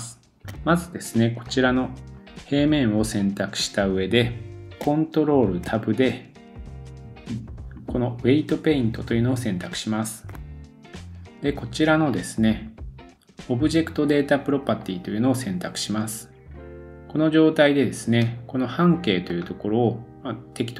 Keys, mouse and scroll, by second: 0.2 shift+middle click, 0.2 scroll down 1, 1.4 click, 5.7 ctrl+Tab, 14.8 click, 14.9-16.6 middle drag, 16.6 super+z, 16.6-20.7 drag.